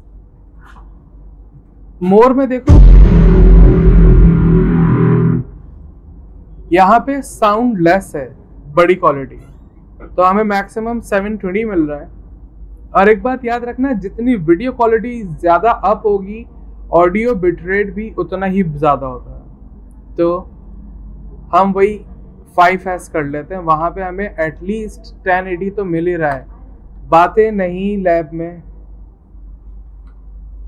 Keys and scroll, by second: 25.7-26.5 typing, 29.1-29.9 typing.